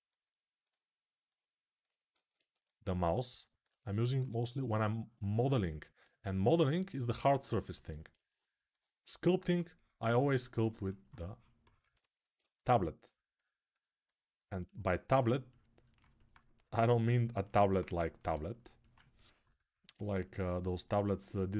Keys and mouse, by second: 1.9 alt+q, 3.8 alt+q, 7.4-11.6 alt+drag, 17.5-21.5 ctrl+right drag.